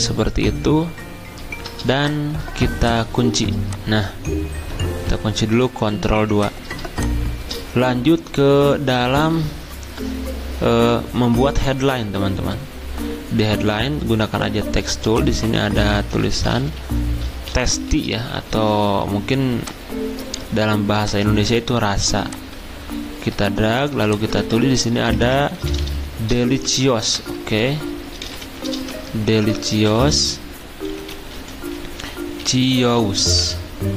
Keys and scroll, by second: 4.9 ctrl+z, 5.9 ctrl+2, 13.6 t, 15.9-17.9 typing, 18.3 Escape, 24.4 ctrl+a, 24.9-29.8 typing, 26.7 ctrl+a, 31.8-33.9 typing.